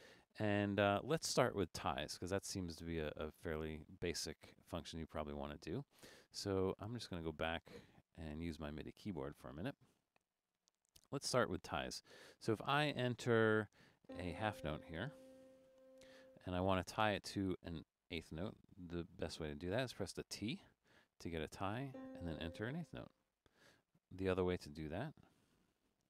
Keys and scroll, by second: 0.5 BackSpace, 11.6 Up, 12.3 Down, 15.7 6, 20.5 t, 22.6 4, 23.9 Left, 25.2 BackSpace, 25.7 Left.